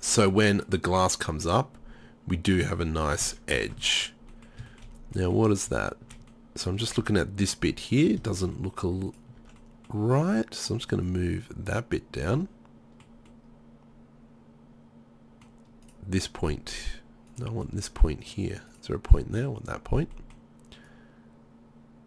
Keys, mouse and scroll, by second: 0.6-2.8 middle drag, 2.9-4.0 middle drag, 6.4-6.7 middle drag, 9.2 click, 9.4 Tab, 11.1 middle click, 12.4 middle click, 14.4 middle click, 17.8-19.3 middle drag.